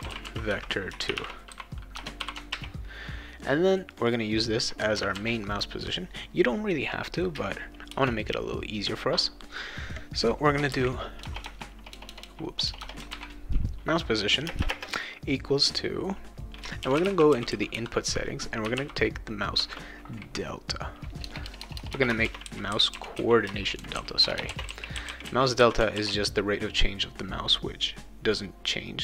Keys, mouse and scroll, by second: 0.0-2.2 typing, 2.5 ctrl+s, 3.9 click, 4.0 click, 5.1 ctrl+c, 5.5 click, 7.9 Return, 10.7-12.8 typing, 14.4 space, 14.5 =, 14.7 space, 16.5-19.3 typing, 21.2-25.5 typing.